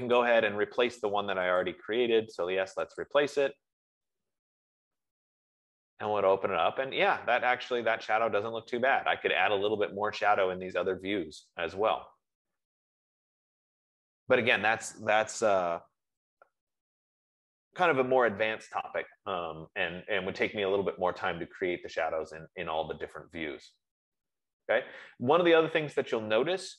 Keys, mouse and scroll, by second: 0.7 click, 2.3 click, 3.4 click, 15.9 F15.